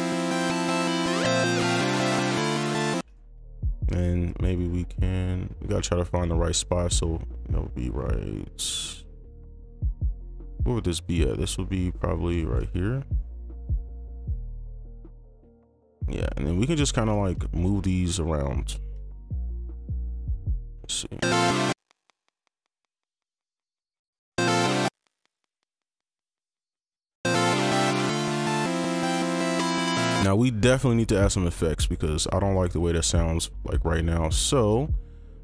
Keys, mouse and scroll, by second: 2.9 space, 3.0 right click, 9.6-10.5 scroll down 1, 12.4 ctrl+click, 13.5 shift+2, 13.5 shift+click, 17.0 right click, 17.4 ctrl+click, 18.2 shift+Up, 19.6 shift+Up, 20.4 scroll up 1, 21.7 space, 22.1 ctrl+click, 23.2 shift+Up, 23.6 shift+Up, 24.3 space, 24.8 space, 25.3 ctrl+click, 25.5 shift+Down, 26.1-26.9 shift+Up, 28.3 space, 28.5 ctrl+right click, 30.2 space, 31.5 ctrl+right click, 32.2 ctrl+click, 33.7 click.